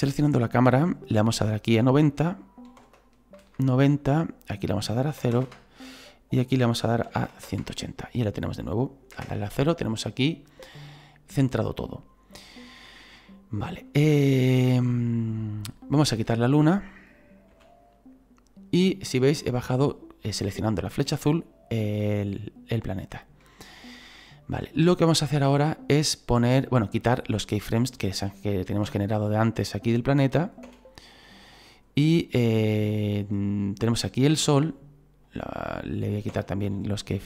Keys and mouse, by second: 1.4 click, 2.7 KP_9, 2.8 KP_0, 3.4 Return, 4.5 click, 5.2 KP_0, 5.4 Return, 6.3 click, 7.1 KP_1, 7.6 Return, 9.2 KP_0, 13.9 right click, 14.6 click, 16.2 right click, 17.5 Delete, 18.8 right click, 27.6 right click, 28.9 Delete, 29.1 click, 30.3 right click, 30.6 Delete, 31.0 click, 32.5 click, 33.5 right click, 35.2 right click, 36.3 Delete, 36.6 click.